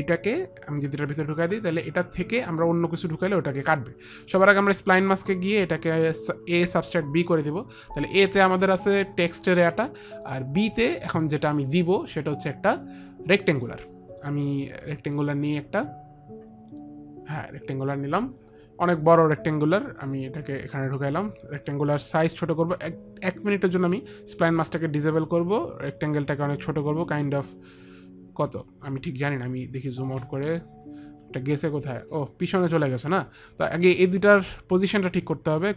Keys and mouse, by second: 0.5 click, 2.1 click, 4.6 click, 5.8 click, 7.4 click, 15.5 click, 19.5 click, 20.4 click, 21.6 click, 24.2 click, 24.6 click, 27.3 click, 28.9 click, 35.5 click.